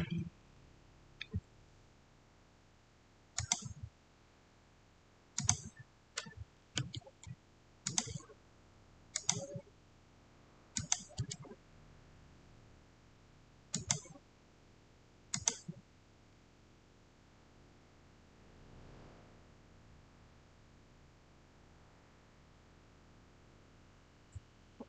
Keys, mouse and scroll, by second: 3.2 click, 3.3 click, 5.3 click, 7.7 click, 7.7 click, 13.6 click, 13.6 click.